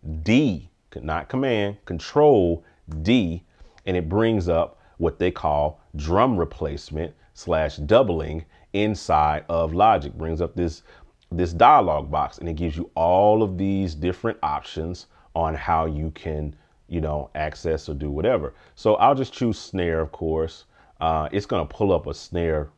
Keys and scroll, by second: 2.9 ctrl+d.